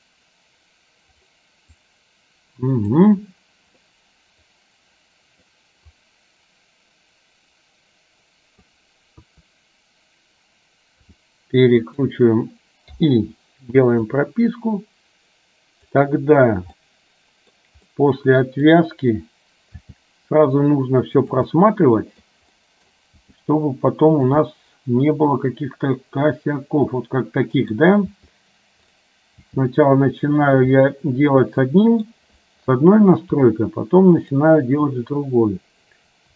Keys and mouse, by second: 1.9-3.2 drag, 3.9-5.4 middle drag, 6.1-8.8 drag, 9.3 KP_1, 11.2 r, 13.1 i, 14.4-16.1 drag, 16.9 middle click, 18.1 middle click, 19.9 g, 21.7 middle click, 22.6 middle click, 23.3 g, 24.6-27.8 middle drag, 28.1 g, 29.6 g, 30.9-32.2 middle drag, 33.3 g.